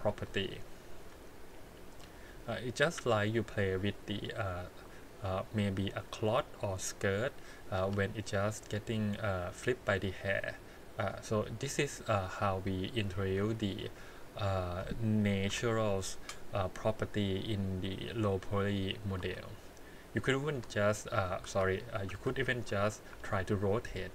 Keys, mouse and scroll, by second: 0.2 click, 0.8 click, 1.0 g, 2.4 middle click, 3.8 click, 4.1 click, 4.7 g, 5.9 click, 6.0 g, 7.5 click, 7.8 g, 9.4 click, 9.6 g, 10.3 click, 11.0 click, 11.3 middle click, 12.0 g, 12.9 click, 13.4 g, 14.1 middle click, 15.5 KP_1, 16.8 click, 17.0 g, 18.7 click, 19.2 g, 21.1 click, 21.4 ctrl+z, 22.3 ctrl+z, 23.1 r.